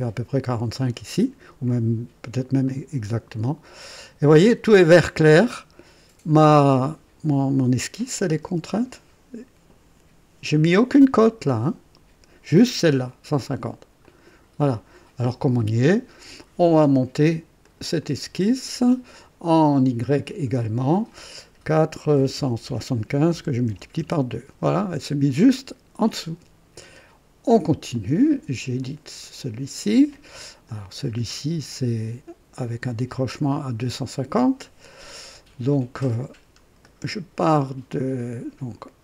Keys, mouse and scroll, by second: 2.6-4.4 drag, 14.0 click, 17.6 click, 18.2 click, 20.5 click, 22.1 KP_4, 22.3 KP_7, 22.6 KP_5, 23.6 KP_2, 24.0 KP_Enter, 27.9 click, 28.6 click, 30.7 click, 34.9 click, 36.0 scroll up 2, 36.8 right click.